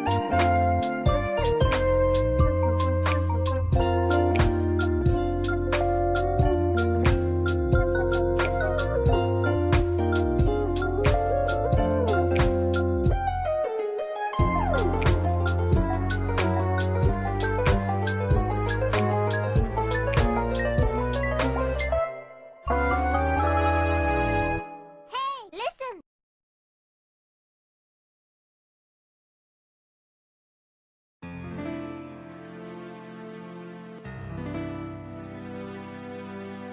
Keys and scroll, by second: 0.2 scroll down 1, 0.4 scroll up 1, 13.5 scroll down 1, 14.0 scroll up 1, 27.8 scroll down 1, 28.2-28.5 scroll up 1, 29.8 scroll down 1, 29.9 scroll up 1, 31.1 scroll down 1, 31.3 scroll up 1, 32.1 ctrl+z, 34.0-34.5 scroll down 1, 35.6 scroll up 1.